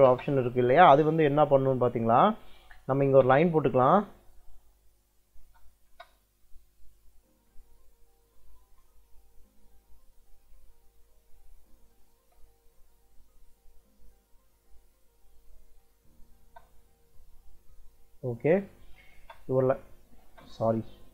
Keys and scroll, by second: 0.0 space, 2.0 Escape, 2.7 l, 2.9 space, 5.3 space, 8.1 ctrl+l, 12.1 ctrl+l, 15.2 Escape, 16.3 space, 19.0 space.